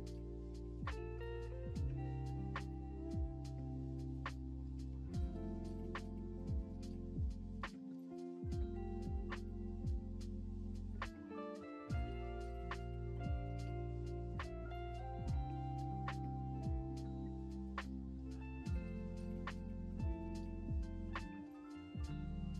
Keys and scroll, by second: 2.4 alt+Home, 12.8 s, 20.6-21.5 typing.